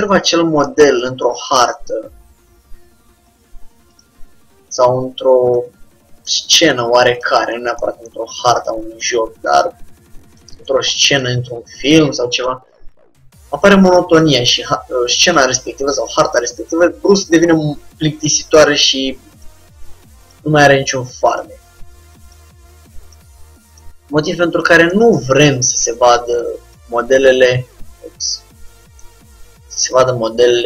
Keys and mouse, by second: 0.0-4.0 middle drag, 4.0-5.7 drag, 4.3 g, 6.3-7.9 drag, 6.4 g, 8.9-10.5 drag, 9.0 g, 12.0-14.4 drag, 12.8 g, 15.5-19.3 drag, 16.1 g, 20.3-22.0 drag, 20.6 g, 22.4-25.2 drag, 22.6 g, 24.0 g, 25.2 middle click, 25.4-28.3 drag, 26.9 g.